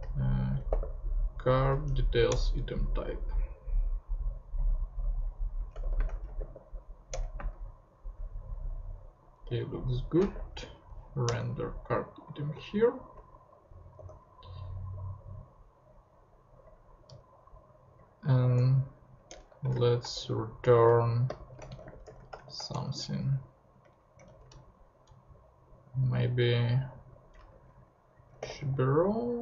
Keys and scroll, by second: 0.0-1.2 typing, 2.3 Return, 5.5-7.4 typing, 7.1 Return, 9.9-10.7 typing, 11.2 Return, 13.9 ;, 17.1 BackSpace, 18.1-19.8 typing, 19.3 Return, 20.1 shift+Return, 21.4-22.8 typing, 23.6 Return, 23.8 Up, 24.3 alt+Right, 24.5 alt+Left, 24.8 Right, 27.3-29.1 typing.